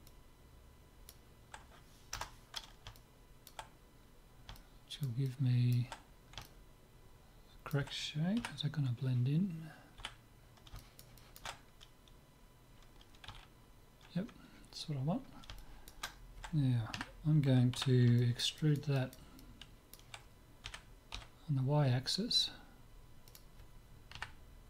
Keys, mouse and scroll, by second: 3.0-8.3 middle drag, 8.5 KP_7, 10.0 z, 10.4-13.7 middle drag, 13.3 z, 14.3-16.9 middle drag, 16.9 KP_3, 17.8 z, 18.2-20.6 middle drag, 20.6 e, 20.8 middle click, 21.2 middle click, 24.1 KP_3.